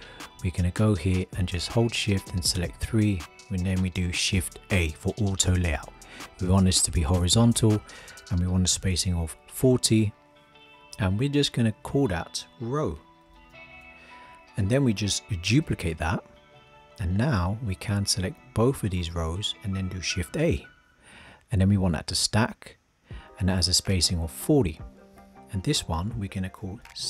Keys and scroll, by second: 4.7 shift+a, 15.6 super+d, 20.3 shift+a.